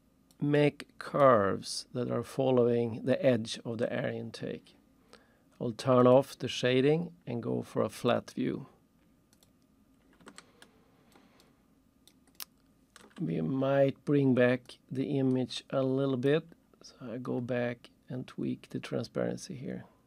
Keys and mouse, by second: 0.0 alt+shift+click, 0.6 alt+shift+right click, 6.0 click, 7.9 click, 9.3 click, 10.4 alt+shift+middle click, 11.4 alt+shift+right click, 12.3 alt+shift+middle click, 14.7 click, 16.3 click.